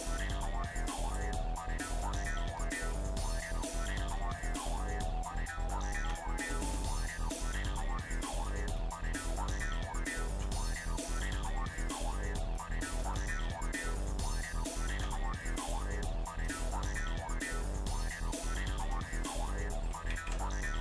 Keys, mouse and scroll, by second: 2.0 shift+middle click, 2.9 middle click, 3.4 shift+middle click, 5.3 scroll up 1, 6.0 Tab, 7.1-8.5 shift+middle drag, 8.7 middle click, 10.3 z, 11.7 middle click, 12.5 shift+middle click, 13.1 middle click, 13.7 scroll up 1, 14.9 Tab, 15.6 click, 16.5-18.8 shift+middle drag, 20.2 alt+a.